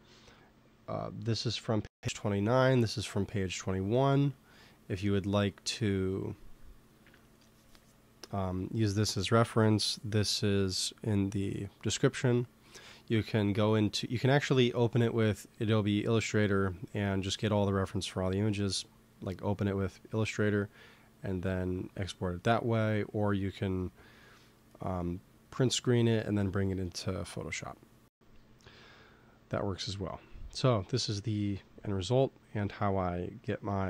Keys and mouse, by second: 3.8-7.4 middle drag, 32.5-33.8 middle drag.